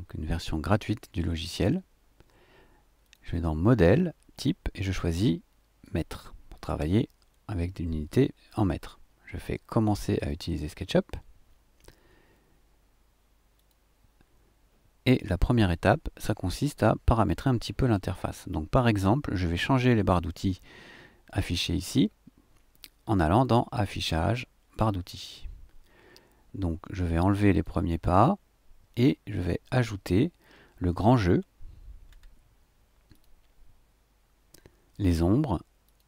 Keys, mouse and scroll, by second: 3.0 click, 5.8 click, 10.2 click, 13.6 click, 23.3 click, 24.7 click, 27.5 click, 31.3 scroll down 1, 32.1 scroll up 1, 33.1 click, 35.8 click.